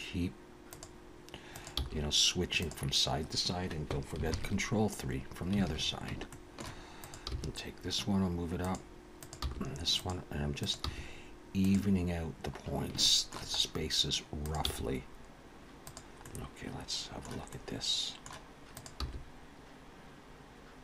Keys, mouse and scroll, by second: 1.5 click, 1.7 g, 4.3 ctrl+KP_3, 5.6 alt+a, 6.3 shift+middle click, 7.0 click, 7.3 g, 9.2 click, 9.5 g, 10.6 click, 10.9 g, 12.6-13.0 scroll down 3, 13.0 shift+middle click, 13.6-14.4 scroll up 2, 14.4 click, 14.7 g, 16.2 middle click, 17.5 middle click, 18.7 click, 19.0 g.